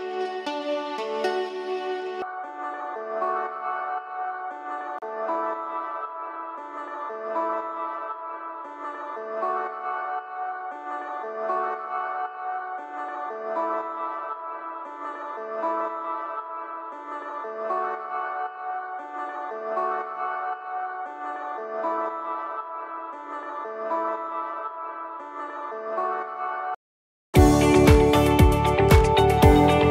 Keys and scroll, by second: 26.5 s.